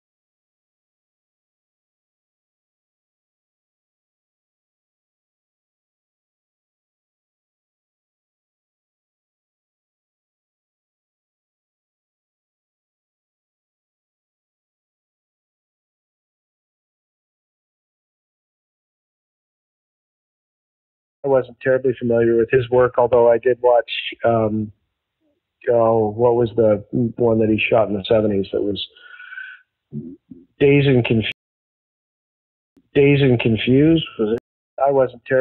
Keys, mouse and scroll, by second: 1.1 Return, 4.6 click, 8.2 click, 12.5 click, 12.9 click, 14.9-15.3 scroll down 1, 15.7 scroll down 1, 16.6 scroll down 2, 17.1 scroll down 2, 17.7 scroll up 2, 19.9 scroll up 2, 21.0 click, 22.9 click, 25.1-31.4 drag, 31.2 space, 32.1 ctrl+shift+Delete, 32.7 space, 33.2-34.2 drag, 34.3 space, 34.7 click, 34.7 space.